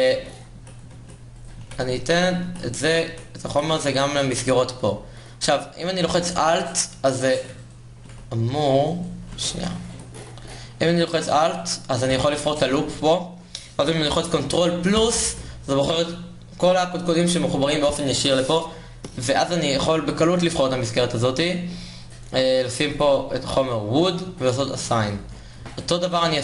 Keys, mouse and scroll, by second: 0.3 KP_0, 1.7 Tab, 2.1-5.8 typing, 2.4 ctrl+Tab, 9.6 a, 10.9 a, 11.3 click, 11.8-16.4 drag, 16.4 ctrl+KP_Add, 20.0-21.8 middle drag, 21.8-26.4 drag.